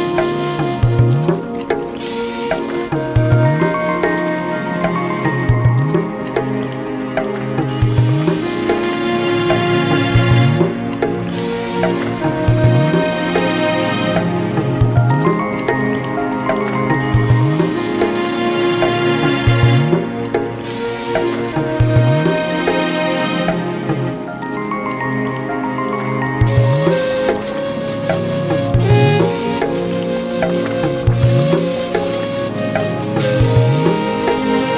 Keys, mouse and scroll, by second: 0.3 Tab, 0.5 right click, 1.3-2.6 drag, 2.8-4.2 drag, 5.0 Tab, 5.1 click, 6.1 Tab, 7.0 Tab, 7.5 click, 8.0 Tab, 8.8-11.8 typing, 9.3 scroll up 4, 9.6 click, 10.6 click, 11.6 click, 13.3 click, 14.4-15.4 right drag, 15.4 click, 15.6 right click, 16.6 click, 16.9 click, 17.3 click, 17.5 shift+click, 17.7 g, 18.7 shift+click, 18.8 g, 19.4 shift+click, 19.7 g, 20.1 s, 20.9 click, 22.0 g, 22.5 click, 22.6 shift+click, 22.9 g, 24.3 click, 24.4 shift+click, 24.6 g, 25.3 g, 25.6 Tab, 26.7-27.4 right drag, 27.5 click, 28.0-29.2 drag, 29.3 Tab, 29.6 click, 30.4 g, 31.0 click, 32.4 Tab, 32.5 click, 32.8 shift+d, 33.7 Tab, 34.1 g.